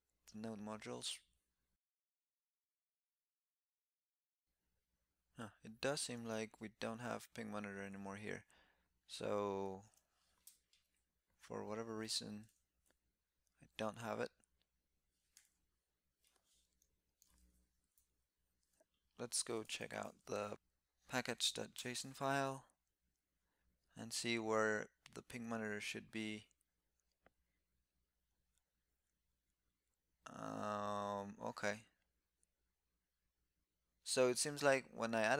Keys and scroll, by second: 10.2 super+b, 12.2 ctrl+c, 17.0 ctrl+<, 19.5 super+p.